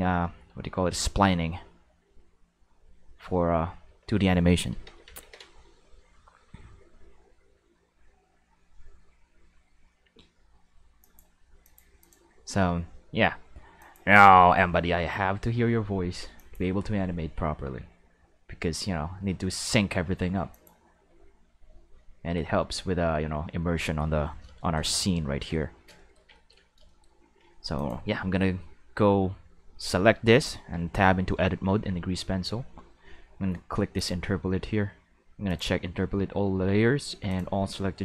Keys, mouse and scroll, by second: 0.2 middle click, 3.9 a, 4.8 ctrl+s, 5.0 ctrl+s, 5.2 ctrl+s, 11.0 click, 11.6 click, 12.0 click, 13.8 click, 16.4 click, 20.5 click, 24.6 shift+middle drag, 25.0 ctrl+middle drag, 27.8 click, 30.3 Tab, 30.5 Tab, 34.0 click, 35.5 click, 37.3 click.